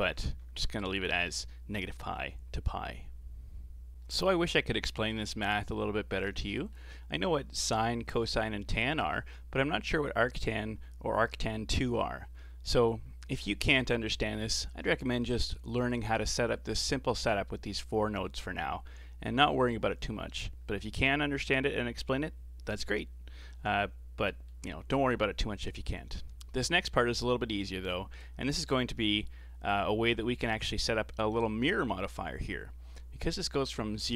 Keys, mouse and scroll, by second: 0.0 ctrl+z, 0.4 ctrl+z, 1.4-1.7 scroll down 5, 1.8-3.9 middle drag, 3.9 scroll down 4, 4.0-7.8 middle drag, 7.8 click, 9.0-11.8 scroll up 1, 12.1-12.6 scroll down 4, 12.6-15.7 middle drag, 19.7-22.0 scroll up 3, 23.5-24.2 scroll down 4, 24.2-27.9 middle drag, 27.9 click, 29.0 g, 31.3-31.8 scroll up 4, 31.8-34.1 middle drag.